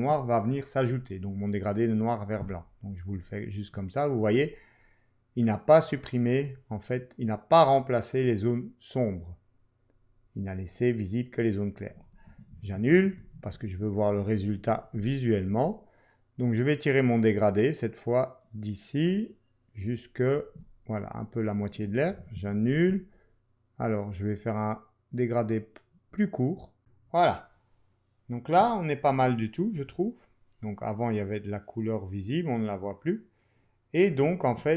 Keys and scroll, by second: 12.5 super+z, 22.2 super+z.